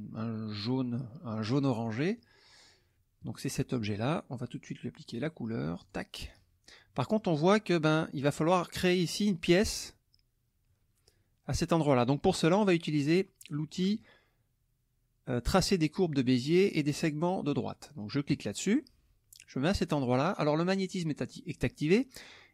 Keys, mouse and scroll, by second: 1.8 middle click, 3.2 click, 5.1 click, 5.8 click, 18.3 click.